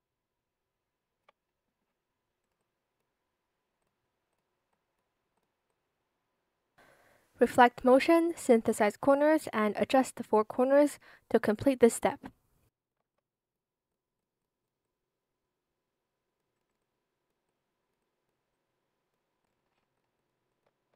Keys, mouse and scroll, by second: 8.8 Return, 12.6 alt+shift+click, 13.1 shift+click, 20.4 shift+click, 20.9 ctrl+z.